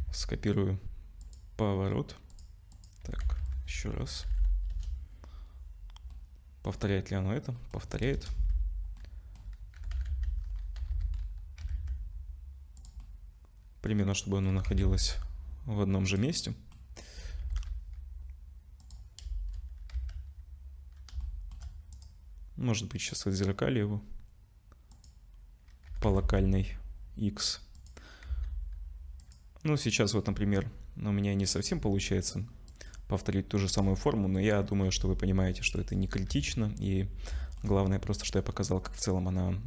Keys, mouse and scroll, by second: 0.0 ctrl+c, 2.3 click, 2.7 click, 3.0 r, 6.1 middle click, 6.7-7.6 scroll down 4, 7.6 middle click, 7.6-8.1 scroll down 1, 8.1 KP_0, 9.0 middle click, 9.4-9.7 scroll down 2, 9.8 g, 13.0 middle click, 14.2 middle click, 14.5 g, 16.3 middle click, 17.0 middle click, 17.2 g, 19.2 KP_0, 19.9 z, 21.2 shift+middle click, 21.9 right click, 25.9 g, 28.3 s, 30.3 r, 31.7 g, 33.7 r, 34.8 g, 36.3 z, 37.4 shift+middle click.